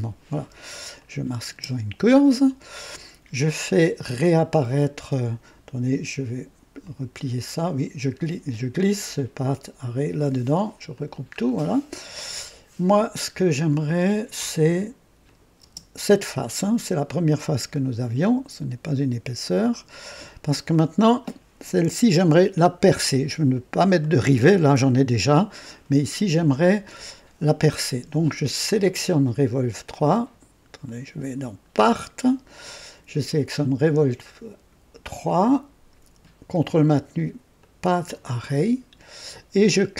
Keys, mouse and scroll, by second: 0.9 click, 1.5 space, 6.8 click, 8.5-10.1 drag, 10.9 click, 11.4-11.7 scroll down 1, 15.2 click, 15.6 space, 17.7-20.5 drag, 20.7 click, 24.0 click, 25.7 click, 31.9 click, 37.6 ctrl+click.